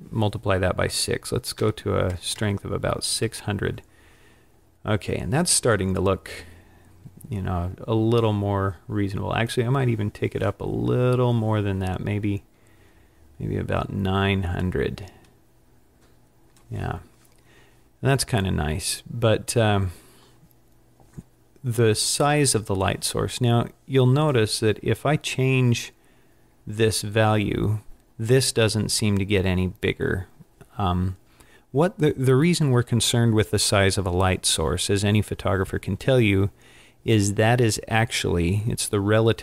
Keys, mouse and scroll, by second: 2.4 KP_0, 5.9 scroll down 1, 9.6 click.